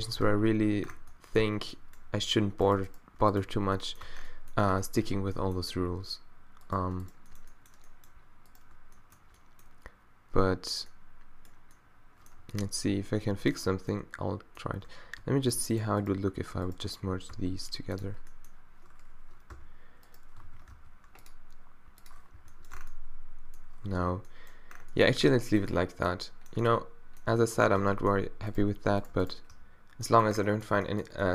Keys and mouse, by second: 0.3 q, 0.9 Tab, 1.4 Tab, 3.4 q, 4.1 Tab, 4.8 Tab, 7.9-9.1 drag, 9.1-11.1 middle drag, 12.4 z, 13.6 middle click, 17.3 w, 19.5 e, 20.4 z, 20.8 w, 22.4 z, 22.8 Tab, 24.0 z, 27.8 Tab, 29.5 q.